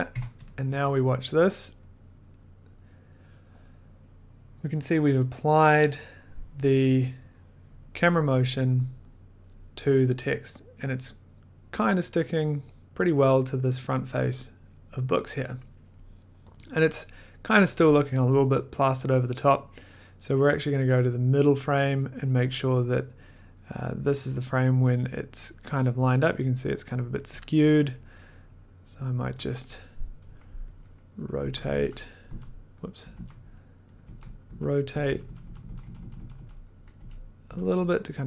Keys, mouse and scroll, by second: 0.1 1, 0.4 click, 1.9 click, 2.4 click, 20.9 click, 21.6 click, 27.3 click, 28.7 click, 29.0 click, 29.1 click, 30.7 click, 31.4 Left, 31.7 Down, 32.2 Up, 33.1 Left, 33.9 click, 34.0 Left, 34.5 Up, 34.9 Left, 35.0 Left, 35.2 Left, 35.4 Left, 35.6 Left, 35.8 Left, 35.9 Left, 36.1 Left, 36.3 Left, 36.9 Down, 37.4 Up.